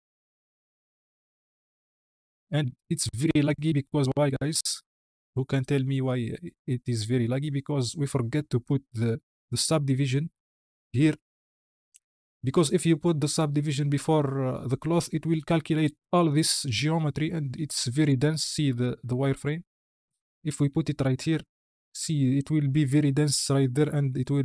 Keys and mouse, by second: 4.9 space, 7.5 click, 8.5 click, 10.9-11.8 drag, 18.1 alt+v, 20.5-21.0 drag, 22.3 shift+middle click.